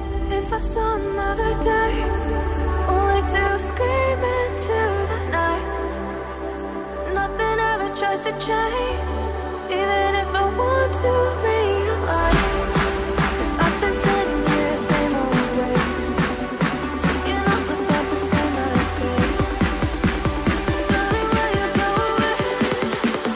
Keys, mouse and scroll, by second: 11.2 right click, 13.6 right click, 14.3 right click, 19.7 right click.